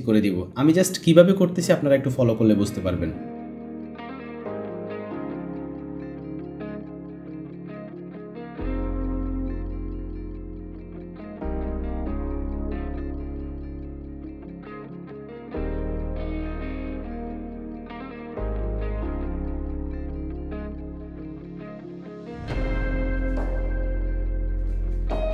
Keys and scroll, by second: 19.4 u.